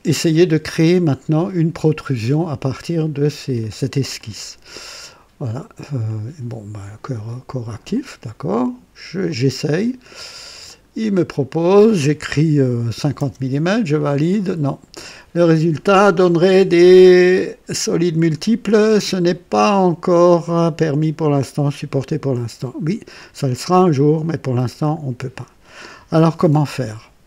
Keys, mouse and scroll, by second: 4.1 click, 6.0 click, 7.6 click, 9.2 click, 10.5 click, 12.9 KP_5, 13.1 KP_0, 13.9 click, 23.6 click, 24.8 click.